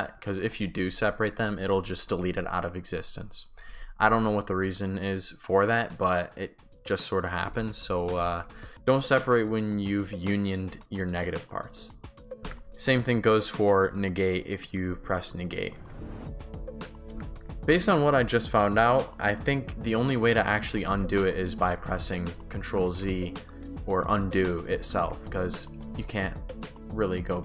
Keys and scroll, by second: 7.5 ctrl+z, 8.3 shift+w, 12.5 ctrl+z, 13.0 Pause, 15.8 ctrl+z, 17.1 Pause, 21.7 ctrl+z, 22.9 ctrl+shift+z, 25.0 ctrl+shift+z.